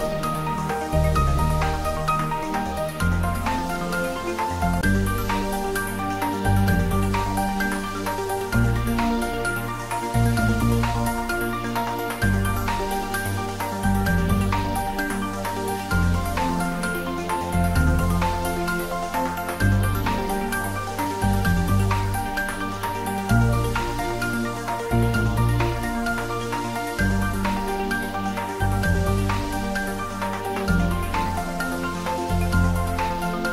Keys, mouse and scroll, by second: 0.6-1.2 middle click, 1.3-1.6 scroll down 1, 1.6-2.2 middle click, 3.1 shift+a, 4.4 click, 6.9-7.7 scroll up 1, 7.5-8.4 typing, 8.8 click, 9.2-9.7 scroll down 1, 9.7 s, 12.1 click, 13.0 g, 14.3 click, 14.8 scroll up 1, 15.4 s, 15.7 z, 17.1 click, 17.8 g, 18.9 click, 19.2 s, 20.1 click, 20.4-20.8 scroll down 1, 20.8 s, 21.1 z, 22.2 click, 22.5-23.2 middle click, 23.4 click, 24.4 g, 25.1 z, 26.4 click, 26.8-27.7 scroll up 1, 27.7-29.0 middle drag, 29.1 shift+click, 29.8-30.4 scroll down 1, 30.4 a, 31.3 g, 31.8 z, 33.3 click.